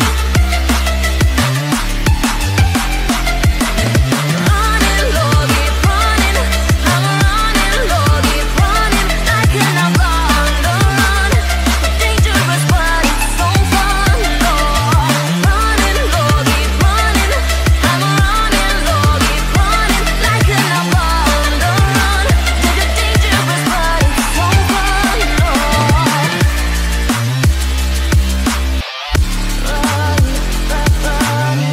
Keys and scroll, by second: 7.3 ctrl+g, 9.8 ctrl+a, 13.8 ctrl+d.